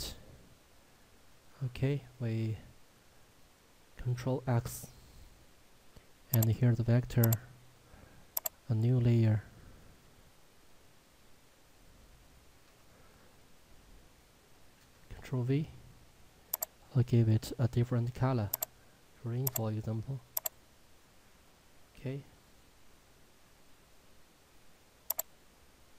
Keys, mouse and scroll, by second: 4.0 ctrl+Num_Lock, 4.5 ctrl+x, 6.4 click, 7.2 right click, 8.4 click, 12.1 shift+Num_Lock, 12.2 v, 12.6 Return, 14.8 ctrl+v, 16.6 click, 25.2 click.